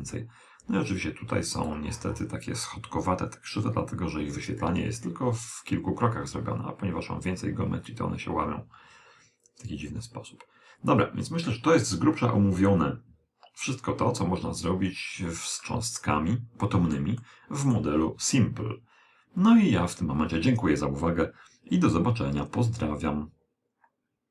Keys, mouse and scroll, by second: 15.7-19.0 middle drag.